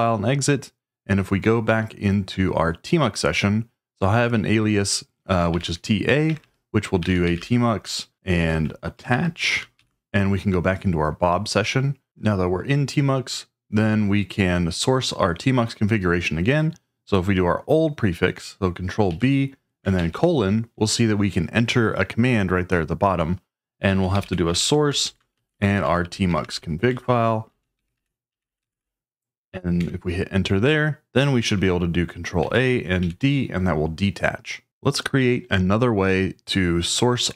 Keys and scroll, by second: 5.5-8.9 typing, 9.8 Tab, 19.1 ctrl+b, 19.9 shift+;, 23.6-29.2 typing, 27.0 Tab, 29.8 Return, 32.4 ctrl+a, 33.0 d.